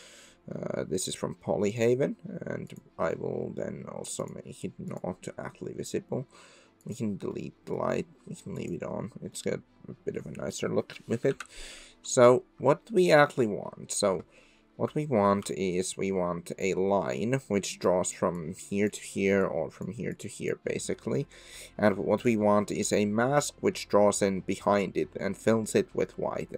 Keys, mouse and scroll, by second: 1.6 middle drag, 2.7-4.3 middle drag, 6.8 middle click, 7.3-7.8 middle drag, 8.6 middle click, 9.3-10.5 middle drag, 11.3 KP_7, 15.5-19.3 d, 16.6 click, 18.5 click, 19.5 click, 19.5-22.2 d, 20.1 click, 22.4 click.